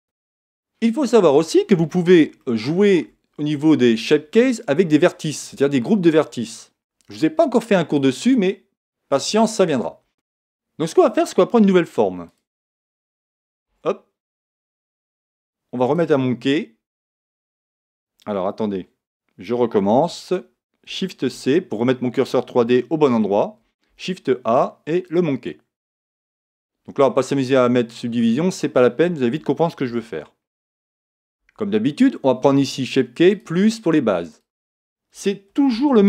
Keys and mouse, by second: 2.4-4.3 middle drag, 4.5-6.9 middle drag, 10.0 Tab, 12.0 x, 13.7 shift+a, 16.9-19.9 middle drag, 19.9 x, 21.3 shift+c, 22.7-24.4 middle drag, 23.9 shift+a, 26.9-29.7 middle drag, 29.9 Tab, 30.2-32.8 middle drag, 33.3-36.0 drag.